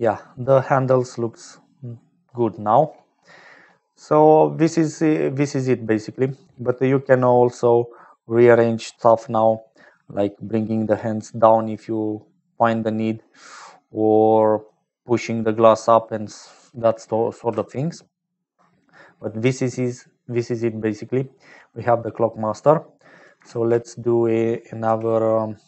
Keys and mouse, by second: 1.6 click, 5.3-6.4 drag, 8.1-9.4 drag, 10.4-11.5 middle drag, 11.5 click, 12.4 middle click, 13.5-14.7 drag, 15.6 click, 19.4 click, 21.8 click, 23.5 shift+a.